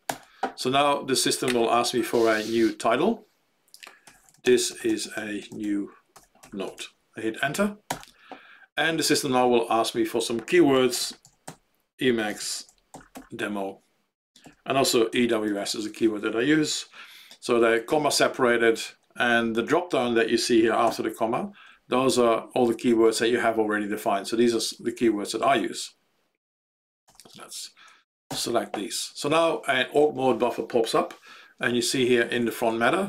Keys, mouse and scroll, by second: 0.0 alt+x, 3.8-7.2 typing, 8.0 Return, 10.4-15.9 typing, 20.8 ,, 21.6-24.5 Down, 24.7-26.7 Up, 27.0 BackSpace, 28.4 alt+x, 32.8 Up.